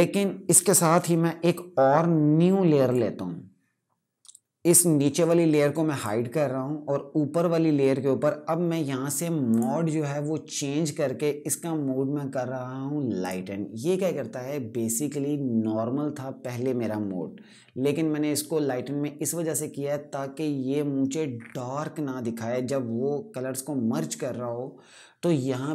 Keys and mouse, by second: 2.6 click, 5.7 click, 9.2 click, 12.9 click.